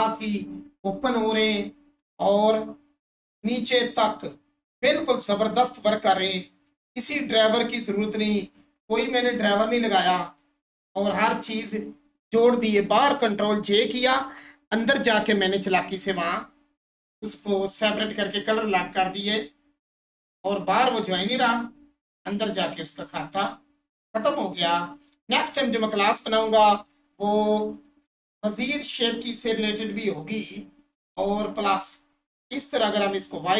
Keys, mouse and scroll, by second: 8.3-8.8 scroll down 1, 8.8-26.3 alt+drag, 29.9 click, 31.0 1, 31.5-33.0 scroll up 1, 33.0-33.5 drag.